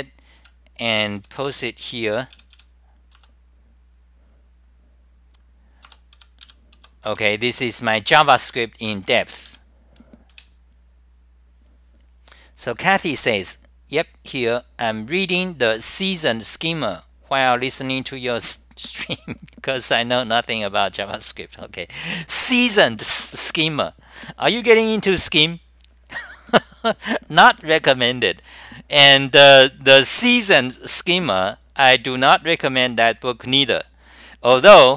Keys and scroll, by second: 0.5-2.6 typing, 3.2 Return, 6.0 Return, 9.4 r, 9.6 q, 10.4 super+r.